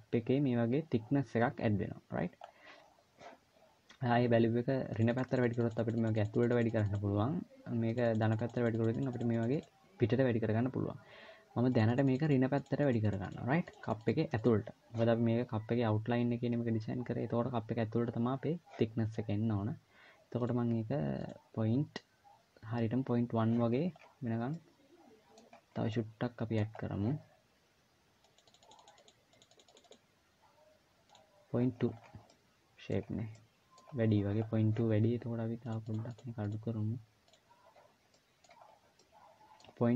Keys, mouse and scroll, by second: 2.2-3.1 scroll up 4, 4.7 click, 4.8-5.5 click, 5.7-8.5 click, 6.1 click, 7.7 click, 8.1 click, 8.7-12.0 click, 12.6 click, 12.8-13.5 click, 13.4 click, 20.2 click, 21.1 click, 23.5-23.9 scroll down 8, 24.3 middle click, 25.2-25.7 scroll up 6, 25.7 middle click, 26.5-26.8 scroll up 1, 28.0 click, 28.2 click, 28.3 click, 28.5 click, 28.8-29.5 click, 29.1 click, 29.3 click, 30.8 click, 31.5-32.0 scroll down 8, 32.0 middle click, 32.8-33.1 scroll up 2, 33.0 middle click, 33.7-34.2 scroll up 1, 34.2-34.6 scroll up 2, 35.4 click, 35.6 click, 35.8 click, 36.1 click, 37.0 click, 37.8 middle click, 38.5-39.0 scroll down 2, 38.7 middle click.